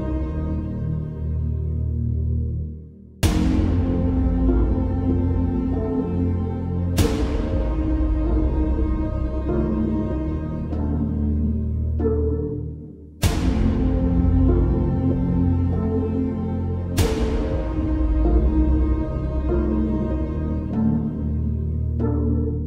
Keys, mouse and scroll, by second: 0.0 Left, 2.5 Return, 3.4-6.1 drag, 8.0 alt+scroll up 2, 8.3 space, 8.4 click, 18.9-19.9 alt+drag.